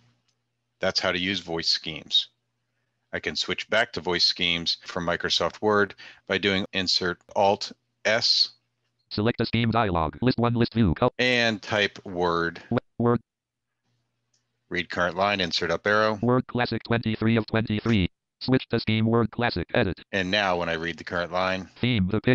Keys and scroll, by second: 6.4 Insert, 6.4 s, 16.6 Up, 16.8 Insert.